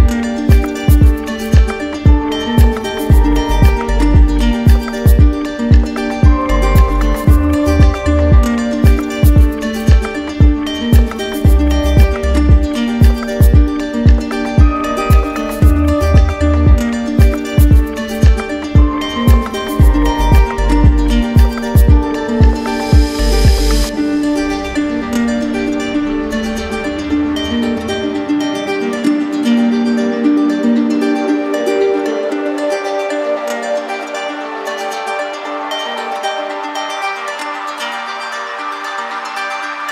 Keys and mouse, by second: 0.4 click, 1.6 ctrl+z, 3.8 click, 5.6 click, 8.4 click, 9.2 w, 14.0-15.1 drag, 15.4-16.5 drag, 19.6-20.7 drag, 23.8 click, 25.1 click, 27.3-28.4 drag, 28.0 q, 29.4-30.5 right drag, 32.3-33.3 right drag, 34.2 click, 35.6 click, 37.0 click, 38.6 click, 39.5 click.